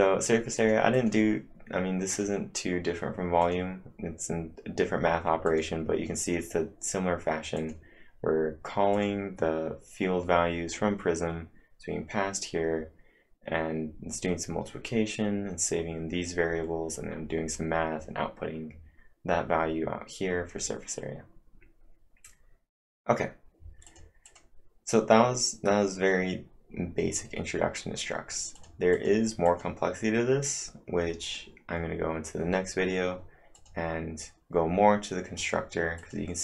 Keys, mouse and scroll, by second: 0.6 click, 0.9 click, 1.9-2.6 typing, 2.1 click, 3.4 click, 7.6 click, 8.9 click, 23.6-24.4 typing, 23.9 click, 24.3 click, 28.3-29.0 typing, 28.5 click, 28.9 click, 29.5 click, 31.2-33.5 click, 35.4 click, 36.0 click.